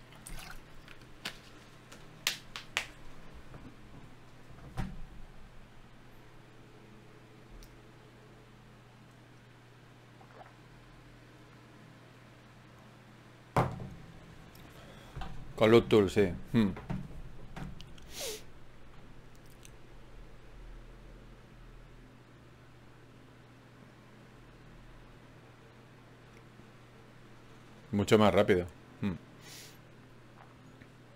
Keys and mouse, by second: 8.8 Tab, 9.4 ctrl+Tab, 12.3-16.9 drag, 13.6 shift+q, 19.3 ctrl+z, 20.3 Tab, 21.7 f, 23.0-31.1 drag.